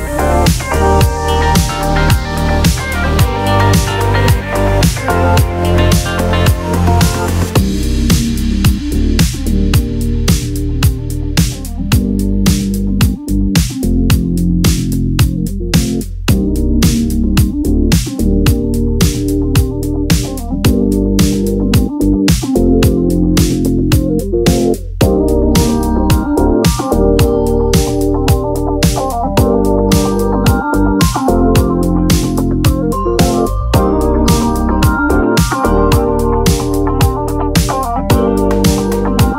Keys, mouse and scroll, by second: 0.4 ctrl+z, 0.9 ctrl+z, 1.6 click, 2.4-4.7 drag, 5.5 click, 6.8 click, 7.3 click, 8.3 click, 8.7 click, 9.0 click, 9.7 click, 10.3 click, 11.7 click, 12.6 click, 13.1 click, 13.3-13.7 scroll down 2, 14.1-14.7 scroll up 2, 14.9 click, 15.4 scroll up 2, 15.7 click, 17.0 click, 17.3 scroll up 1, 17.7-19.6 drag, 19.6-20.0 scroll down 1, 20.2-22.2 drag, 22.3-24.3 drag, 24.6-27.0 drag, 27.0-27.4 scroll down 2, 27.4 e, 30.0 scroll up 2, 31.3 e, 32.8 click, 33.1 e, 34.3 click, 34.5 e, 35.7 click, 36.0 e, 37.0 click, 37.2 scroll down 2, 37.9-38.3 scroll up 3, 39.0 click.